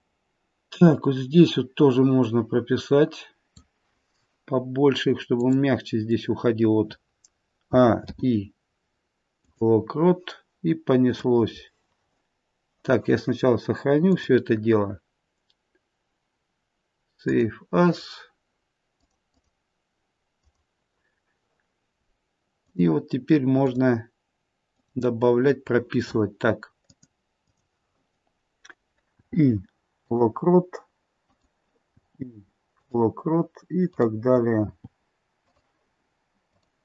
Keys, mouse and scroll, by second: 5.4 click, 7.7 a, 8.0 i, 11.0 click, 22.7 click, 23.6 click, 26.8 click, 27.5 click, 29.1 i, 31.2 click, 31.8 i, 33.9 click, 34.6 i, 36.5 click.